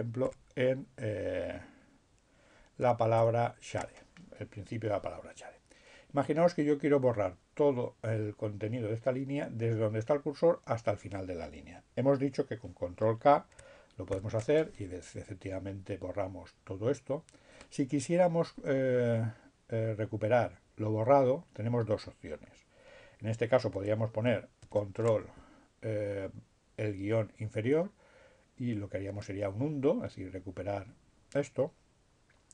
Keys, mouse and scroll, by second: 0.6 f, 13.0 ctrl+k, 24.8 ctrl+shift+-.